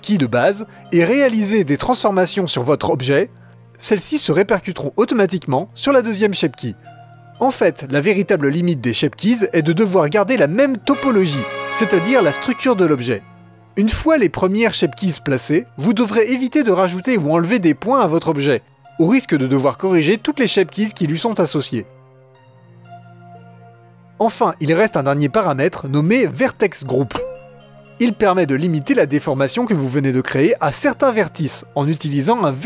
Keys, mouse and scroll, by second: 0.0-1.7 drag, 1.7 g, 2.4 click, 2.6 g, 3.5-5.2 drag, 5.2-15.7 middle drag, 15.7-17.2 scroll up 1, 17.7 middle click, 18.1 alt+click, 19.3 alt+click, 19.7 e, 20.5 Tab, 21.4 Tab, 21.8 click, 22.3 s, 23.4 g, 24.1 click, 26.8-29.2 drag, 31.3-32.6 middle drag.